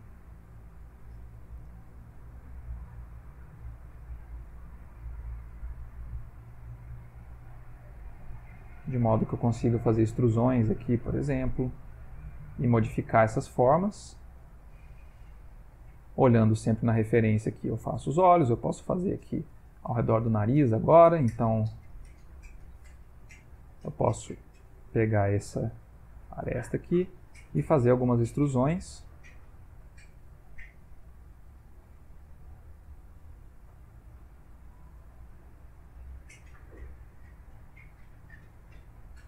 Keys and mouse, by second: 0.0 ctrl+z, 1.7 ctrl+r, 6.0 g, 8.3 click, 8.9 shift+click, 9.5 e, 11.7 click, 11.9 g, 13.4 middle click, 14.3 ctrl+middle click, 20.0 ctrl+middle click, 22.0 ctrl+r, 23.6 click, 24.0 middle click, 24.9 click, 25.4 shift+click, 25.8 middle click, 26.3 e, 27.6 e, 29.1 r, 29.9 shift+middle click, 30.5 e, 31.6 middle click, 32.6 g, 33.4 e, 34.8 r, 35.5 e, 36.8 middle click, 37.3 r, 38.1 g.